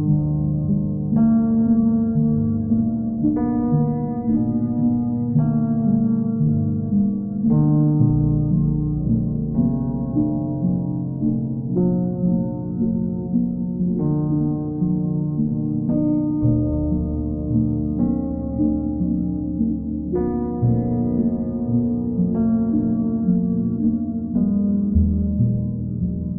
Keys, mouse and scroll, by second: 0.2 right click, 0.6 middle click, 2.1 alt+click, 7.4 middle click, 10.1 middle click, 10.3 middle click, 10.8 alt+middle click, 12.1 alt+click, 13.7 alt+click, 14.5 ctrl+click, 16.0 ctrl+click, 16.3 ctrl+click, 16.8 w, 23.0 click, 24.6 click, 25.1 ctrl+click, 25.6 click.